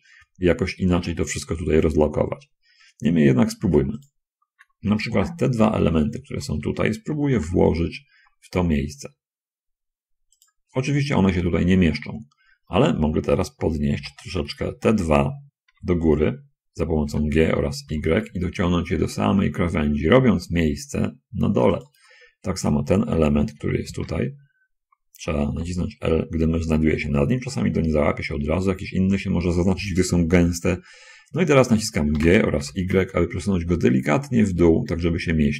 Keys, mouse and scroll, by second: 4.3 click, 5.8 shift+l, 7.7 g, 10.7 click, 10.9 middle click, 12.3 shift+click, 14.1 l, 15.9 shift+l, 16.9 g, 18.2 y, 22.0 shift+click, 23.9 l, 25.9 l, 32.2 g, 32.8 y.